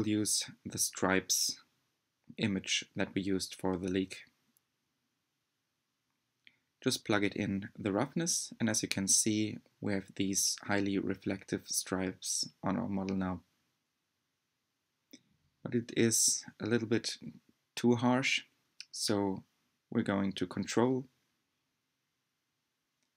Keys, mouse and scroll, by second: 5.2 click, 10.7-13.2 shift+middle drag, 13.2 click.